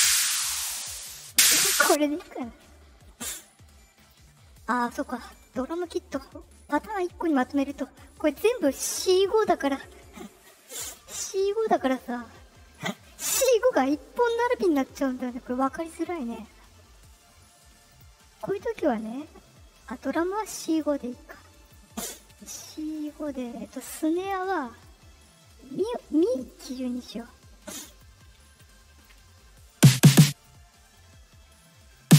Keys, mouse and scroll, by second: 1.1-1.8 drag, 3.9 click, 6.7 click, 11.9 click, 17.8 click, 20.6 click, 21.6 click, 22.8 click, 24.7 right click, 26.3 click, 27.8 click, 28.5 ctrl+click, 29.6 click, 30.8 right click, 31.4 right click, 31.9 click.